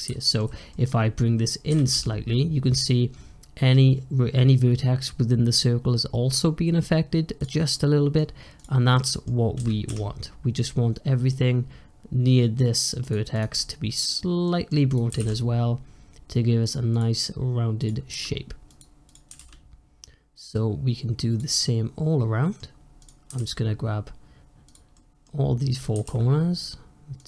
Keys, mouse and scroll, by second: 0.1-1.6 middle drag, 1.6 g, 7.6 middle click, 8.4 click, 8.8 middle click, 9.4 g, 13.2 click, 13.4-14.8 middle drag, 14.8 click, 15.0 g, 17.6 click, 18.0 g, 18.9 click, 19.1 g, 21.5-22.9 middle drag, 22.9 click, 23.1 g, 24.8 middle click, 25.6 click, 25.8 g.